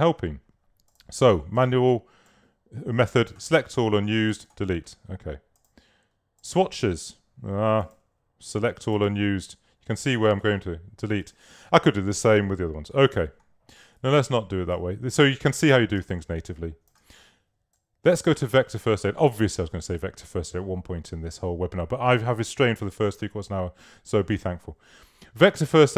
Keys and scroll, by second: 14.1 super+z, 16.1 super+space.